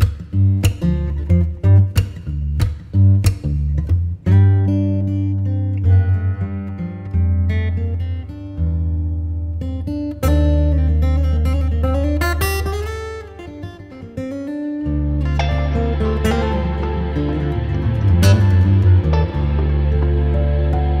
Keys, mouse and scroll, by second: 0.5 click, 2.9-5.8 drag, 5.8-8.0 middle drag, 8.0-11.1 drag, 12.7-18.2 drag, 18.2 KP_0, 20.6-21.0 drag.